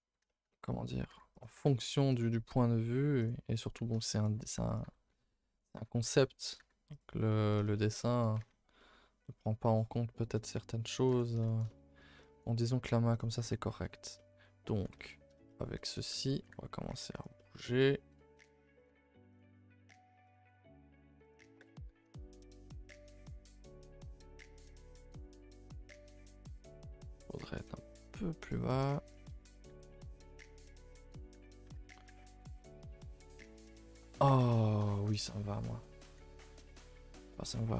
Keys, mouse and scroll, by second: 0.7-1.0 scroll up 1, 1.0 g, 1.5 r, 2.2 g, 3.6 middle click, 4.3 g, 4.8 r, 6.0 r, 6.5 g, 7.2-8.3 middle drag, 8.3 scroll down 1, 8.3 Tab, 8.4-8.7 scroll up 1, 8.7 middle click, 8.9 scroll down 2, 9.2-11.0 middle drag, 11.0 Tab, 11.4 shift+middle click, 12.0-12.7 scroll up 2, 12.1 middle click, 12.7 g, 13.3-14.8 middle drag, 14.8 l, 14.9-16.4 middle drag, 16.4 g, 17.3-18.3 middle drag, 18.3 r, 18.8 g, 19.6 middle click, 20.0 r, 20.4 g, 21.6 KP_0, 22.9-23.2 scroll up 2, 23.2 shift+middle click, 23.6 scroll up 1, 23.8-26.2 shift+middle drag, 26.2 r, 27.1 g, 29.7 r, 31.3 alt+h, 31.7 a, 31.8 a, 32.6 Tab, 33.4 click, 33.9 a, 34.1 a, 35.0 shift+middle click, 35.2 scroll up 1, 35.4 Tab, 36.3 ctrl+z, 36.5 ctrl+z, 37.6 ctrl+z.